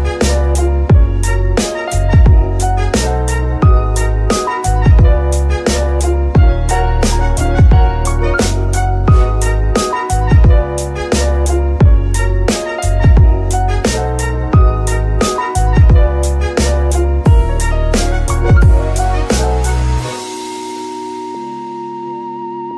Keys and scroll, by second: 0.6 ctrl+Tab, 1.6 Tab, 2.3 alt+a, 4.2 z, 5.5 KP_Divide, 6.4 z, 8.9 z, 13.8 alt+shift+a, 16.0 Tab, 16.4 z, 17.6 KP_Divide, 19.1 ctrl+Tab.